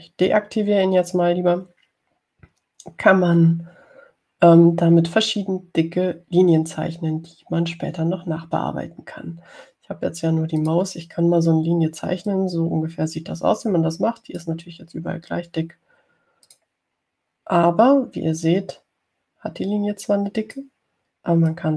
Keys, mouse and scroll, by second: 11.9 click, 13.5-15.8 drag, 17.8 click, 19.7-21.7 drag.